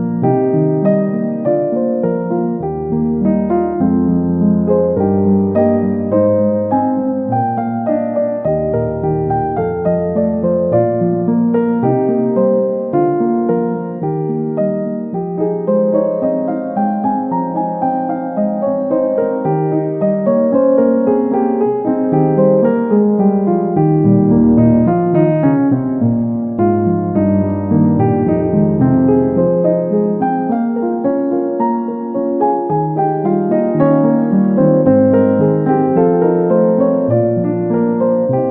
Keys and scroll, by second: 32.8 ctrl+shift+i, 35.7 ctrl+d.